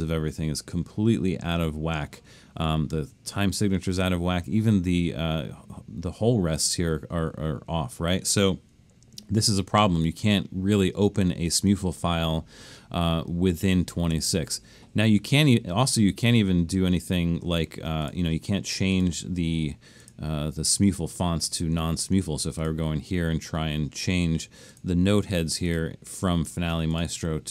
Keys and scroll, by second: 10.1 super+-, 10.8 super+-, 13.9 super+-.